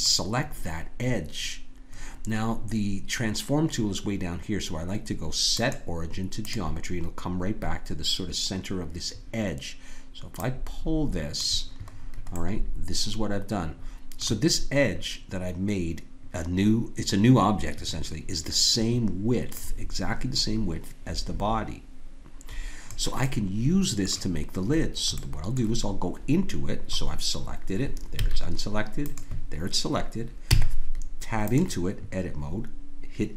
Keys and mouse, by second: 5.5-10.0 drag, 10.4 click, 11.9 click, 12.4-14.7 middle drag, 19.5-22.5 drag, 23.2-28.2 drag, 28.2 a, 29.0-31.4 drag, 30.5 Tab.